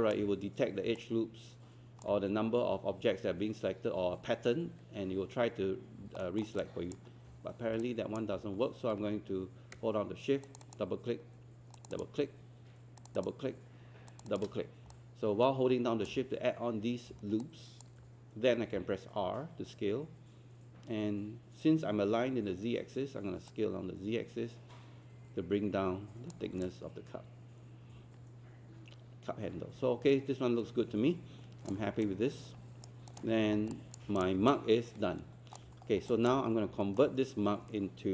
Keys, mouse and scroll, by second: 1.0 alt+click, 6.2 alt+middle click, 6.6 alt+click, 7.8 alt+click, 10.4 shift+click, 11.8 shift+click, 13.0 shift+click, 13.2 shift+click, 14.1 shift+click, 17.4 alt+click, 23.5-26.5 drag, 26.7-31.7 alt+drag, 32.1 right click, 33.1 click, 33.5 scroll down 1, 33.7 alt+click, 34.5 alt+click, 35.9 scroll down 1, 36.1 alt+click, 36.5 scroll up 1, 36.8 alt+middle click.